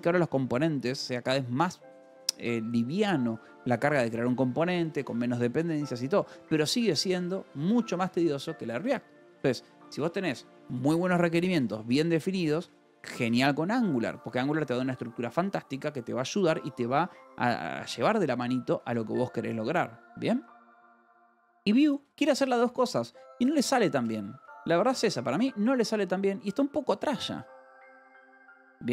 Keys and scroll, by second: 5.4 Escape, 7.5 Escape, 7.9 k, 8.8 Escape, 9.2 j, 10.0 j, 11.4 Escape, 11.5 k, 12.3 shift+v, 12.4 Escape, 12.7 k, 13.7 shift+v, 13.8 Escape, 19.3 Escape, 20.7 j, 22.0 v, 22.2 j, 22.8 Escape, 23.3 a, 23.5 space, 23.9 BackSpace, 24.7 space.